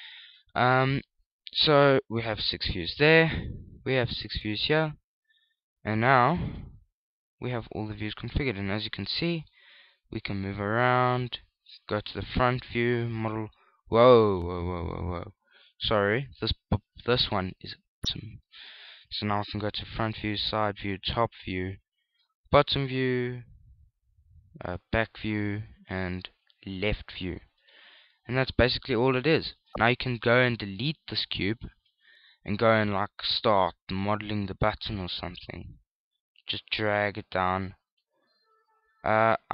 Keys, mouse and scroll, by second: 0.3 shift+middle click, 7.2 n, 7.8 middle click, 11.0 shift+middle click, 11.3-12.5 shift+scroll up 3, 12.7-13.1 scroll up 2, 13.1 KP_1, 14.0 shift+middle click, 14.0-14.7 shift+scroll up 1, 15.5 n, 17.7 click, 21.0 KP_1, 21.3 KP_3, 22.1 KP_7, 23.7 ctrl+KP_7, 24.6 KP_1, 25.8 ctrl+KP_1, 26.8 KP_3, 27.6 ctrl+KP_3, 29.6 middle click, 29.6-30.2 scroll up 1, 30.2 shift+middle click, 30.7-31.6 shift+scroll up 1, 31.6 middle click, 31.6-32.1 scroll down 2, 32.1 middle click, 32.1 x, 33.1 KP_1, 33.8 shift+a, 35.5 s, 36.6 click, 37.2 click, 39.1 s.